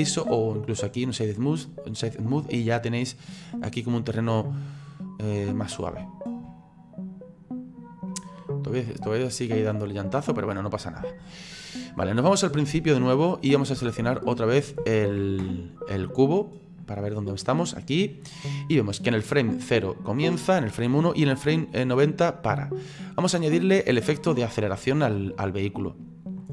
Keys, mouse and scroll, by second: 3.3 click, 3.8 scroll up 3, 4.2-9.1 middle drag, 9.1-9.5 scroll down 3, 11.5-13.9 drag, 13.9 shift+middle click, 14.8-16.5 shift+middle drag, 16.5 right click, 19.4 click.